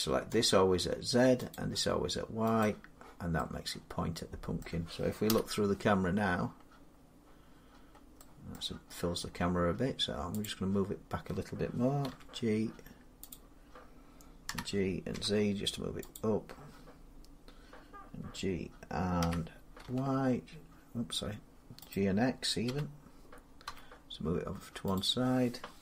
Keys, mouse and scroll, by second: 0.3 click, 1.3 click, 2.4 click, 4.4 middle click, 5.1 0, 8.4 middle click, 8.7 scroll up 1, 8.8-9.4 scroll down 7, 10.2 click, 11.9 g, 12.6 middle click, 13.1 click, 14.3 g, 14.9 z, 16.0 click, 19.0 g, 19.6 y, 21.7 click, 22.5-23.5 typing, 24.6 g, 24.8 click.